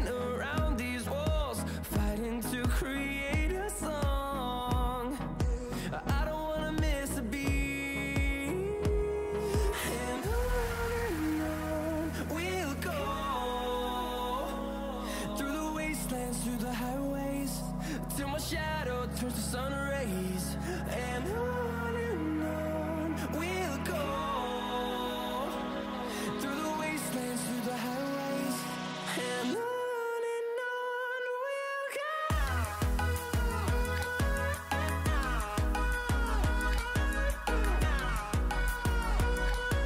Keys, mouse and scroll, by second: 1.9 click, 2.3-2.8 scroll up 1, 2.8 click, 3.7 Up, 6.4 scroll down 1, 7.5-9.7 drag, 12.4 click, 21.7 F10, 22.4 click, 24.5 right click, 25.2 click, 26.0-27.2 scroll down 1, 27.2-28.8 scroll up 1, 30.3-39.8 drag, 31.1 typing.